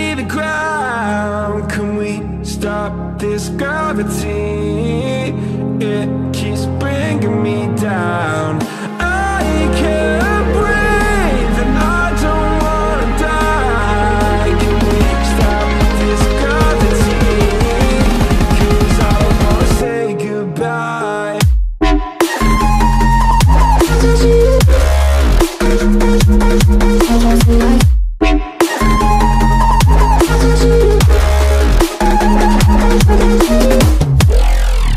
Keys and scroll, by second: 0.6 ctrl+z.